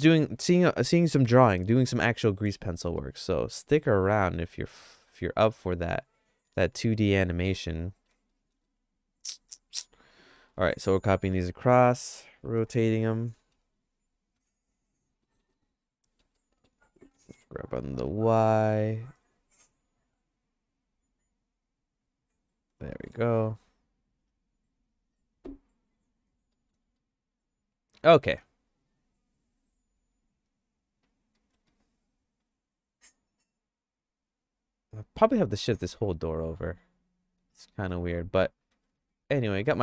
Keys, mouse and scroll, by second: 2.8 middle click, 3.0-8.1 shift+middle drag, 8.3 middle click, 8.7-9.8 shift+middle drag, 10.4 shift+d, 12.4 r, 15.2 middle click, 15.6 shift+middle click, 16.3 middle click, 17.1 g, 22.9 middle click, 24.2 KP_Decimal, 26.5 middle click, 27.0-28.3 shift+middle drag, 31.4 middle click, 31.7-37.9 shift+middle drag, 39.1 ctrl+s.